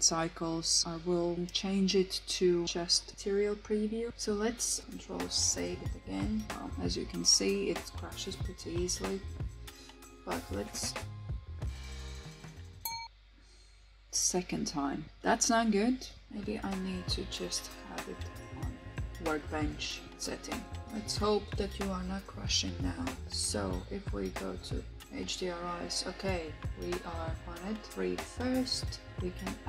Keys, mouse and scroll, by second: 4.1 ctrl+s, 10.4 click.